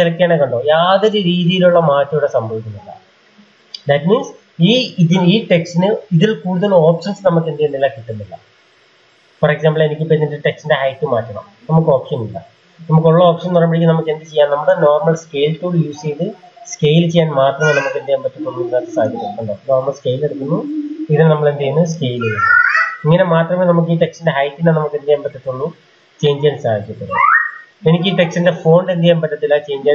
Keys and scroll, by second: 14.1 typing, 16.8 Escape, 17.2 Escape, 17.4 Escape, 17.5 Escape, 17.7 Escape, 17.9 Escape, 18.1-21.6 Escape, 18.3-19.3 typing, 21.3-22.1 typing.